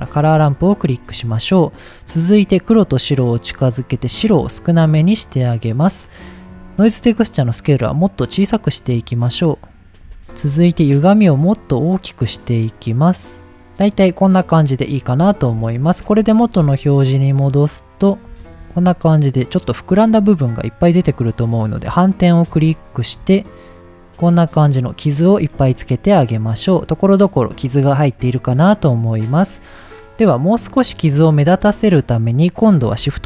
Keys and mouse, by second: 0.1 shift+middle drag, 0.7 middle click, 2.3-3.1 drag, 3.5 click, 4.3 click, 6.9-9.9 drag, 9.9 shift+middle click, 11.0-13.5 drag, 15.4 shift+middle click, 17.2 middle drag, 17.9 middle click, 18.5 shift+middle click, 21.4 click, 22.7 shift+middle click, 25.5 middle click, 30.1-30.7 middle drag, 31.5 middle click, 33.0 shift+a.